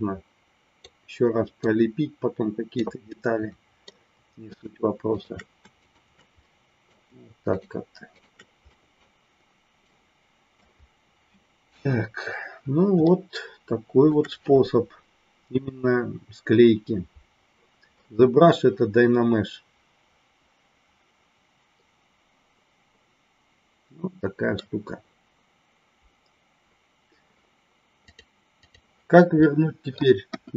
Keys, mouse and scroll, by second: 1.6-2.9 drag, 3.1 middle click, 4.5 shift+click, 5.2 shift+click, 5.7 shift+click, 6.5 middle click, 7.5 shift+click, 8.1 shift+click, 8.7 middle click, 9.8 middle click, 11.6 KP_1, 13.0-14.1 shift+middle drag, 18.0-24.5 middle drag, 28.1 click, 29.3 middle click, 30.2 KP_1.